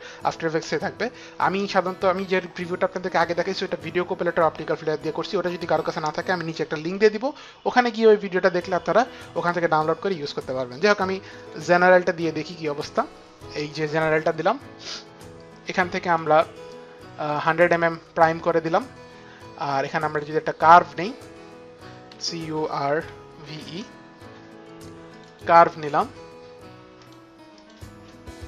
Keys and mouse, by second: 10.9 click, 15.7 click, 17.0 click, 19.9 click, 20.5 click, 21.5-23.0 typing, 24.5-25.3 typing, 24.8 click, 26.6 click, 27.2 click, 27.2 e, 27.5 click.